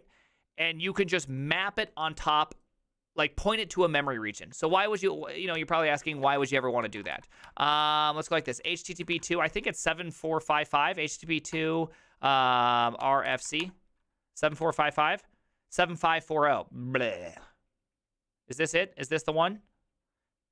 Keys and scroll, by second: 4.9 alt++, 5.6 alt+[, 6.3 alt++, 7.0 alt+f, 7.2 alt+h, 7.9 ctrl+t, 8.1-9.7 typing, 11.6 typing, 12.8-14.0 typing, 14.7 alt+f.